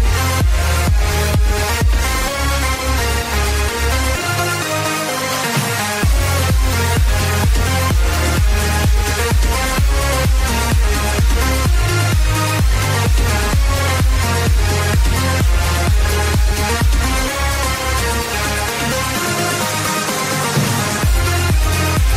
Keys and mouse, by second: 3.8 click, 4.9 click, 5.4 ctrl+d, 5.7 ctrl+d, 7.0 Return, 7.9-14.2 typing, 10.4 click, 11.1 Return, 11.3 click, 11.6 click, 15.4 Return, 17.3 click, 18.7 click, 18.7-22.1 typing, 19.2 click.